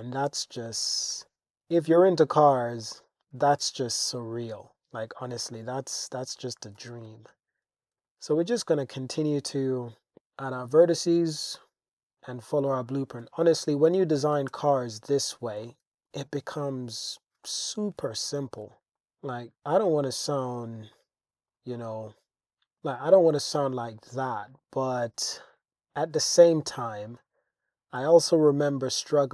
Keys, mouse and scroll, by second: 1.4 g, 1.4 z, 2.8 click, 3.6 super+r, 4.5 click, 5.3 g, 5.5 g, 6.4 click, 6.8 g, 7.1 z, 8.0 super+r, 8.0 super+e, 8.3 click, 8.8 click, 9.7 click, 10.2 g, 10.2 z, 10.6 click, 11.4 click, 12.2 click, 13.2 g, 13.5 z, 14.3 click, 14.5 Tab, 15.6-17.2 drag, 17.5 shift+drag, 18.2-18.6 shift+drag, 18.3-18.6 right drag, 18.6 Tab, 19.0 click, 19.4 click, 21.5 click, 22.8 click, 24.4 shift+drag, 25.4 shift+click, 26.2 Tab, 26.9 click, 28.0 g, 28.2 y.